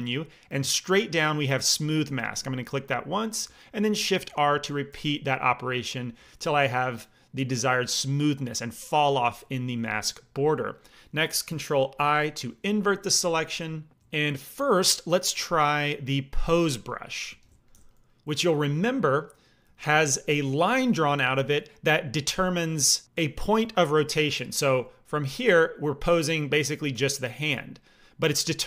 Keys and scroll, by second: 4.1 shift+r, 4.8 shift+r, 11.9 ctrl+i, 17.2 f, 19.6 f, 28.4 ctrl+z.